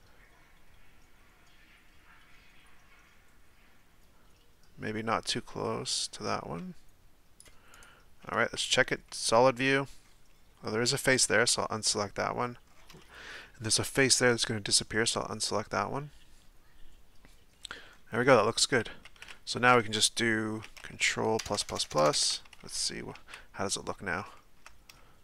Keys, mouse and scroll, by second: 8.5 z, 9.1-11.0 middle drag, 11.0 shift+right click, 11.6-12.7 middle drag, 12.7-13.0 scroll up 3, 13.0-13.9 shift+middle drag, 13.9 shift+right click, 14.4-17.6 middle drag, 17.6-18.2 scroll down 4, 18.2-19.0 middle drag, 19.0 z, 19.3-21.4 middle drag, 21.4-22.1 ctrl+KP_Add, 23.3 z, 23.9-24.4 scroll up 1, 24.4-25.2 shift+middle drag.